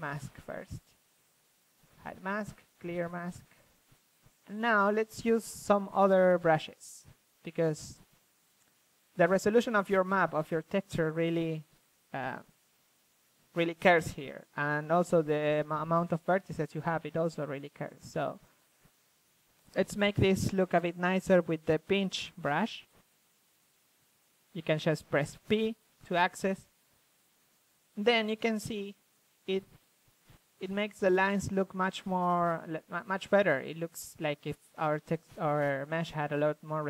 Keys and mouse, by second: 0.6-2.7 middle drag, 2.7 click, 3.8 middle click, 4.0 middle click, 4.5 middle click, 6.9 shift+f, 7.9 ctrl+z, 9.0 ctrl+z, 10.2 click, 11.8 middle click, 12.5 click, 13.4-14.4 middle drag, 14.5-15.9 middle drag, 15.9-17.1 drag, 20.4-20.9 drag, 20.9 shift+f, 21.3-22.3 drag, 22.3 shift+f, 24.1-25.1 drag, 26.2-32.2 drag, 29.5 f, 32.2 middle drag, 32.4 click, 33.1-33.8 middle drag, 33.7 f, 33.8-35.0 drag.